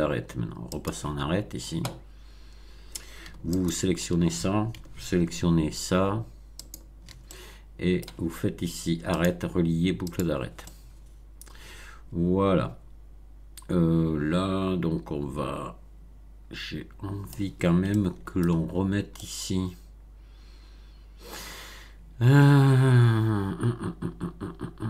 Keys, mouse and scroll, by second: 0.7 click, 3.5 alt+click, 6.6 alt+shift+click, 7.2 alt+shift+middle click, 9.1 click, 10.0 click, 10.6-17.5 middle drag, 17.8-18.6 shift+middle drag, 18.7 shift+scroll up 2, 19.1-24.8 middle drag.